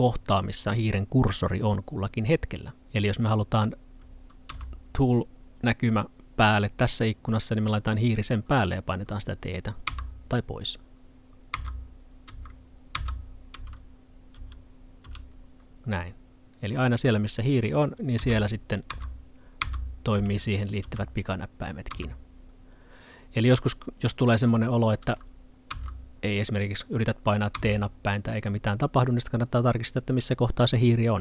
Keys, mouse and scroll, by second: 4.5 t, 9.9 t, 12.3-15.1 typing, 18.2-20.8 typing, 21.9 t, 25.7 t, 27.6 t.